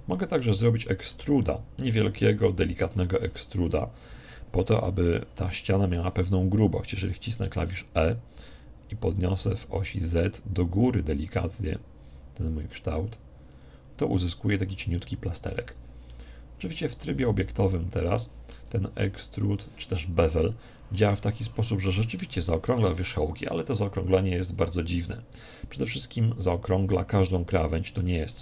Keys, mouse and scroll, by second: 2.5 KP_1, 3.7-5.7 middle drag, 8.1 e, 13.6 click, 14.1-23.7 middle drag, 15.6 Tab, 25.0 Tab.